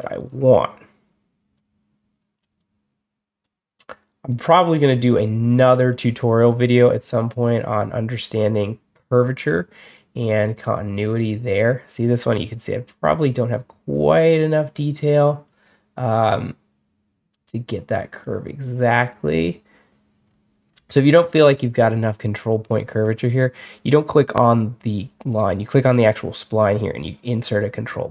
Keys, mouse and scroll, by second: 0.1-1.4 drag, 2.2-3.3 drag, 4.2-5.8 drag, 6.5-8.8 drag, 9.8-11.5 drag, 12.3-15.3 drag, 16.1-18.1 drag, 19.0 click, 20.1 scroll down 2, 20.5-21.3 scroll up 4, 21.3 middle click, 21.4 middle drag, 25.1 right click, 26.5 click.